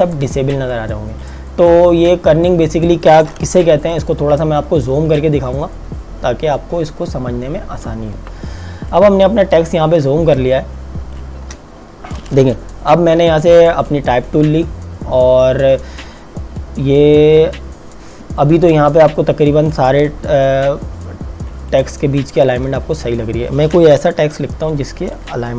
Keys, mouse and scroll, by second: 4.0 click, 5.8 z, 6.5 click, 9.3 KP_Subtract, 10.4 space, 10.5 click, 10.9 space, 13.2 t, 21.7 click, 23.2 space, 24.3 t, 25.1 click.